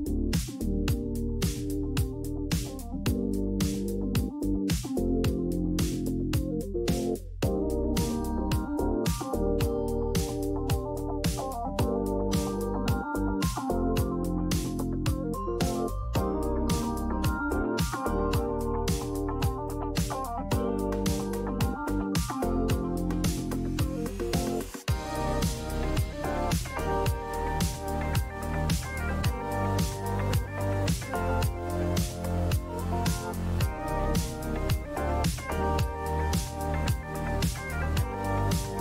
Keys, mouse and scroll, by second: 2.5 click, 4.1 click, 5.5 click, 6.2 click, 7.9 click, 9.9 click, 10.5 click, 12.4 click, 14.8 click, 17.4 click, 19.5 click, 22.7 click, 24.5 click, 29.5 click, 32.4 click, 32.7-33.6 typing, 34.8-35.6 typing, 35.2 click, 37.3 click, 37.5-38.4 typing.